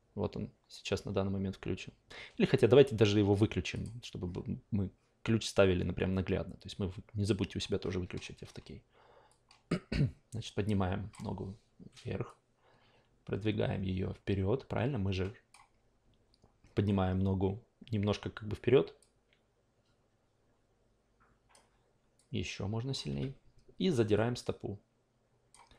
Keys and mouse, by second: 3.7 click, 9.3-11.1 drag, 12.2-21.5 drag, 22.1-22.9 drag, 23.1 e, 24.1-25.5 drag.